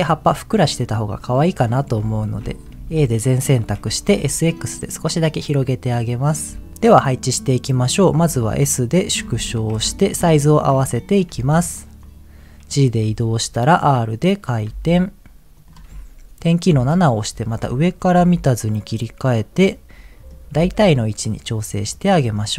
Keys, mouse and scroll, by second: 1.2 middle click, 2.1 Tab, 2.7 a, 3.6 s, 4.0 x, 6.2 click, 6.5 Tab, 7.3 middle click, 8.1 s, 9.1 click, 9.7 KP_1, 10.4 shift+middle click, 10.9-11.3 scroll up 2, 11.3 g, 12.0 click, 13.0 r, 14.5 click, 14.7 g, 15.5 click, 16.7 KP_7, 17.4-17.7 scroll up 2, 18.1 g, 18.8 click, 19.3-20.4 middle drag, 20.5 g, 22.1 click, 22.4 middle click.